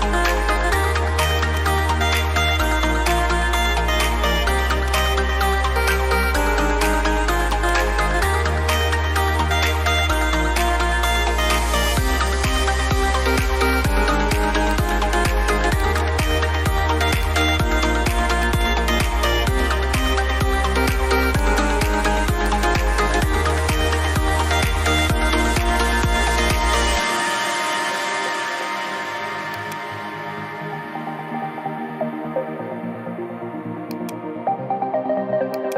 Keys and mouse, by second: 4.6 click, 11.3 click, 14.5 click, 20.3 ctrl+t, 21.3 click, 30.7 KP_Enter, 33.8 KP_Enter, 33.9 click.